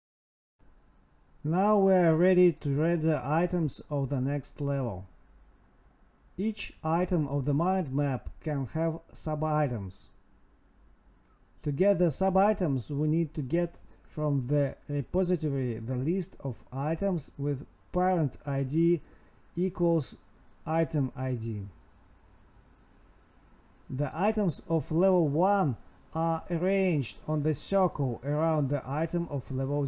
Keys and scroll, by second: 2.1 space, 4.0 space, 4.2 space, 5.1 space, 5.5 space, 6.6 space, 8.2 space, 9.6 Escape, 9.8 Right, 9.9 space, 10.8 Right, 11.8 Down, 12.4 Down, 15.1 ctrl+x, 17.2 Escape, 17.7 Home, 18.0 Up, 18.8 space, 20.0 Tab, 20.2 space, 20.9 space, 21.1 ctrl+v, 22.0 Escape, 22.1 Up, 22.2 End, 23.7 space, 24.6 ctrl+s, 25.7 Home, 28.1 ctrl+x, 29.0 Up, 29.1 Tab.